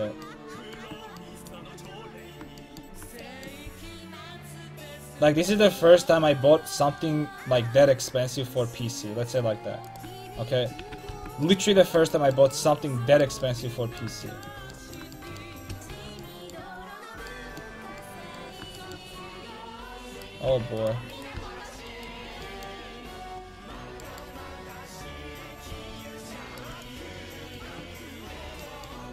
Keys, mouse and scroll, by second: 2.1-3.2 middle drag, 3.8 c, 10.4 ctrl+x, 10.8 a, 11.1 ctrl+t, 15.9 alt+z, 16.8 alt+z, 20.0 Tab, 20.2 click, 20.5 g, 21.5 g, 23.1 Tab, 25.7 c, 26.6-28.4 drag, 26.7 x, 27.7 Tab, 28.4 Tab.